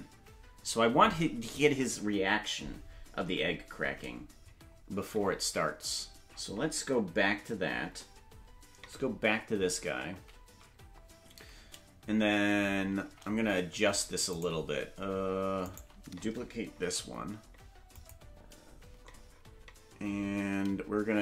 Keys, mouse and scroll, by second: 10.2 ctrl+b, 13.0 shift+`, 15.6-16.8 right drag, 16.8 shift+d.